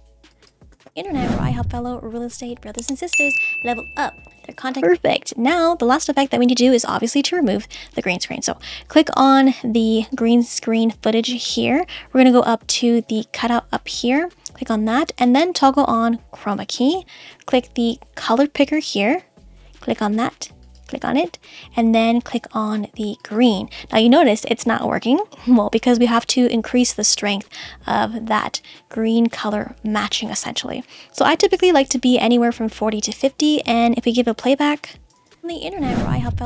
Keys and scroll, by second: 0.7 space, 4.8 space, 35.3 space.